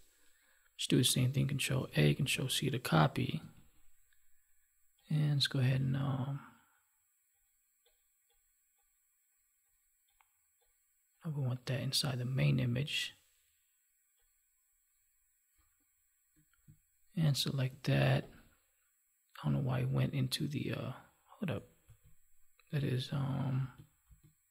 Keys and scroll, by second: 1.7 ctrl+a, 21.8 ctrl+z.